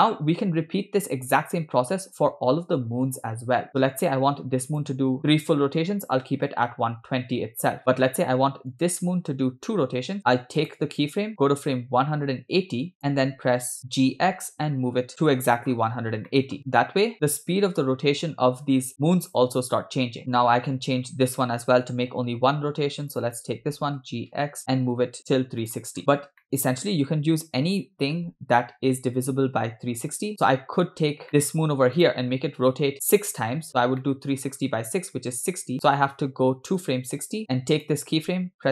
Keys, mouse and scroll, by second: 1.0-1.3 scroll up 3, 4.0 space, 4.8 click, 6.7 click, 8.8 click, 10.7 click, 11.5 click, 13.8 click, 13.8 g, 15.1-15.6 scroll up 7, 15.8 scroll up 3, 16.3 middle click, 16.6 scroll down 10, 16.6 space, 16.7-17.2 scroll up 4, 20.8 scroll up 2, 23.1 click, 24.0 g, 26.1 scroll up 8, 26.4 shift+middle click, 26.7-27.2 scroll up 2, 27.8 g, 30.6 scroll down 2, 31.0-31.3 scroll up 3, 31.3 shift+middle click, 32.0 click, 33.6-34.0 scroll down 4, 34.0 shift+middle click, 34.7 scroll down 1, 35.3-35.9 scroll down 4, 35.7 shift+middle click, 36.9 click, 37.8 click.